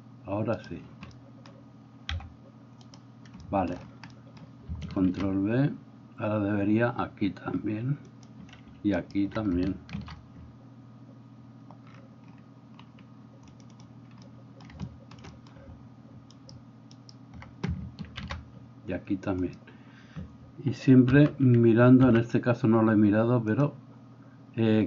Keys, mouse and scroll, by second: 2.2 g, 5.1 ctrl+b, 8.4 middle click, 9.0 alt+click, 9.4-13.7 middle drag, 9.9 ctrl+b, 13.7-14.7 drag, 14.7-16.4 shift+middle drag, 16.4 alt+click, 16.6 alt+middle click, 16.9 alt+click, 17.2-23.5 alt+middle drag, 18.2 ctrl+b, 21.2 m, 22.1 n, 23.5 click, 24.1-24.8 middle drag.